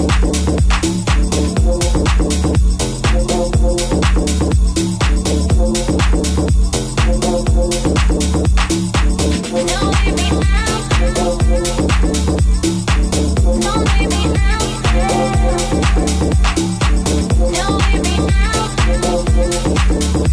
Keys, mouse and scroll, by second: 1.1 alt+right click, 2.4 alt+z, 2.6 c, 4.0 alt+z, 4.7 g, 7.3 shift+right click, 7.3-14.0 shift+middle drag, 10.1 alt+z, 10.4 alt+z, 10.7 Tab, 14.0 right click, 14.1-16.5 middle drag, 14.5 g, 16.0 alt+z, 16.5 right click, 16.5-19.9 middle drag, 17.1 alt+z, 18.9 alt+z, 19.9 right click, 20.1 shift+middle click.